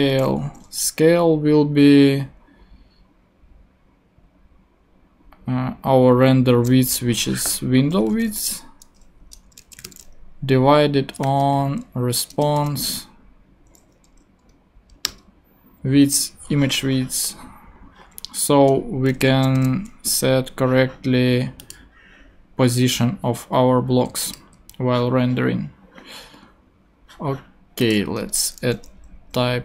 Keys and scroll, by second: 0.0-0.4 typing, 8.1 w, 9.6 space, 9.8 /, 9.8 space, 11.2 r, 11.5 s, 12.3 Return, 12.6 •, 15.0 Return, 19.5 alt+super+l, 28.2 Tab.